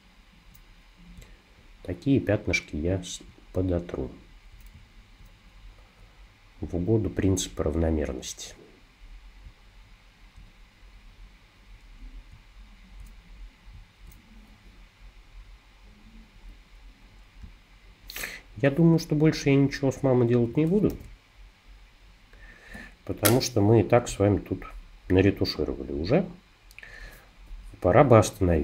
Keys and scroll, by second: 17.4 space, 20.9 super+g.